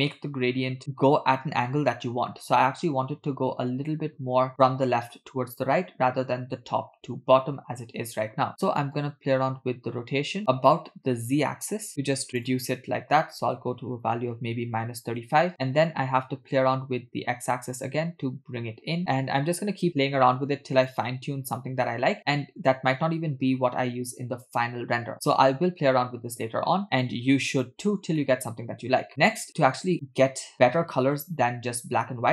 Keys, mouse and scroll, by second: 8.5 middle click, 9.0-10.4 drag, 10.7-12.4 drag, 14.0-15.2 drag, 15.9-20.2 drag, 20.9-25.1 drag, 25.5-26.3 scroll down 1, 26.3 scroll down 1, 26.4 click, 27.1 click, 28.3 middle click, 29.1 scroll up 2, 29.1 middle click.